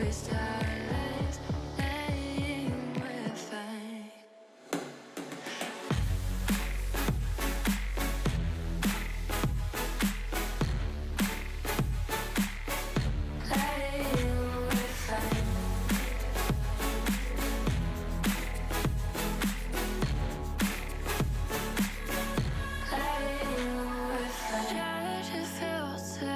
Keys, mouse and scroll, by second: 0.3 scroll up 1, 0.3-1.7 shift+middle drag, 1.8 g, 2.8 alt+z, 3.1 click, 3.6 alt+z, 3.9 g, 6.3 click, 6.3 shift+middle click, 7.6 KP_3, 7.8-8.8 drag, 7.8 shift+middle click, 8.8 e, 11.8 g, 13.8 shift+middle click, 14.1-15.4 scroll up 1, 15.4 click, 15.7 alt+z, 16.0 click, 16.9 alt+z, 17.1 shift+middle click, 17.8 shift+d, 19.7 alt+z, 19.9 shift+middle click, 20.1-20.9 scroll up 2, 20.9 g, 23.1 scroll down 2, 23.4 alt+z, 23.6 middle click, 24.4 scroll down 4, 24.6 Tab, 24.7 click, 25.2 h, 25.4 click, 25.6 Tab, 25.7-26.2 middle drag, 26.2 scroll up 1.